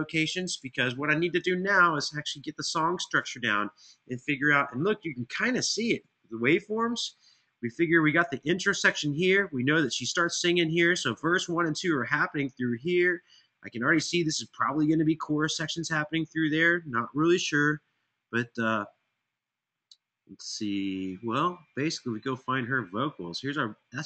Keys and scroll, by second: 0.0 super+[, 0.4 super+[, 4.2 ctrl+alt+Page_Down, 4.4 ctrl+alt+Page_Down, 4.6 ctrl+alt+Page_Down, 4.7 ctrl+alt+Page_Down.